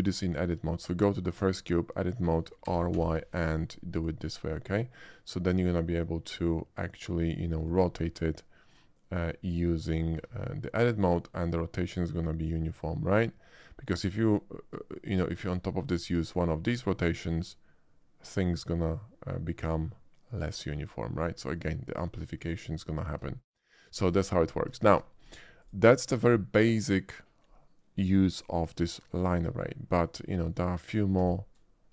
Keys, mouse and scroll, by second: 0.1 shift+middle click, 1.0 shift+click, 1.2 Tab, 2.6 r, 2.9 y, 3.0 r, 7.6 click, 10.2 Tab, 11.0-12.5 drag, 14.7-15.9 drag, 16.6-20.9 drag, 22.3 click, 23.7 shift+click, 23.9 x, 24.0 click, 24.8 shift+middle click, 25.2 shift+click, 25.6 shift+click, 28.8 middle drag, 31.2 shift+a.